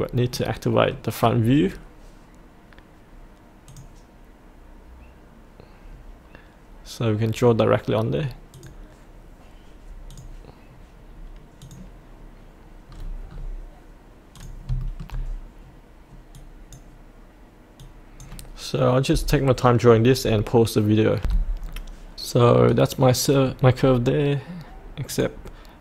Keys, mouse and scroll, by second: 0.3-1.6 middle drag, 3.7 click, 12.9-14.3 scroll down 1, 14.3 click, 14.8 shift+middle click, 16.3 click, 18.8 click, 21.2 F8, 21.6-22.6 scroll up 1, 23.1 middle click, 23.8 scroll up 1, 25.1 click.